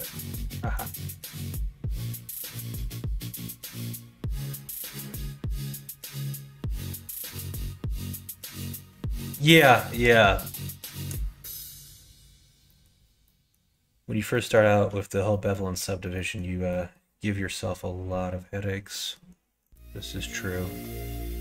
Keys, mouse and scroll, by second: 8.8 middle click, 9.6 shift+middle click, 10.4 middle click, 10.8 shift+middle click, 12.6 middle click, 13.1 middle click, 14.2 middle click, 15.2 shift+middle click, 16.1 middle click, 16.6 middle click, 18.8 middle click, 19.5 click, 20.0 middle click, 20.3 click, 20.7 Tab, 21.0 middle click.